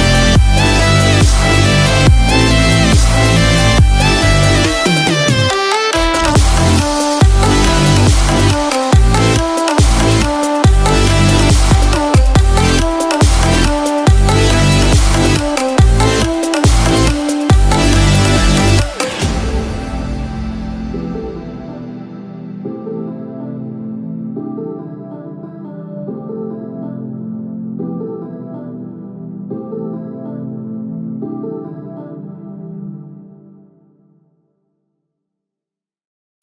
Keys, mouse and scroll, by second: 26.2 KP_0, 31.6 click, 31.6 space.